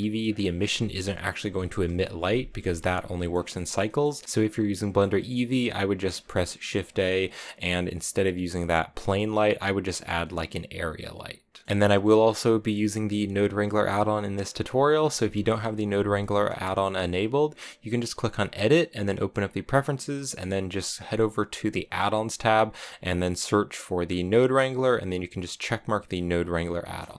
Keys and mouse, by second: 0.2 click, 3.0 middle click, 3.8 middle click, 5.9 shift+a, 18.4-27.1 drag.